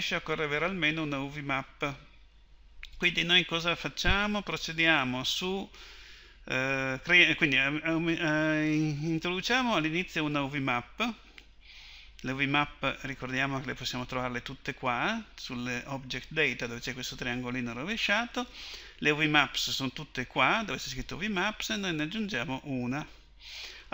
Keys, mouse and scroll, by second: 9.4-16.2 drag, 22.2 click, 23.2-23.9 drag.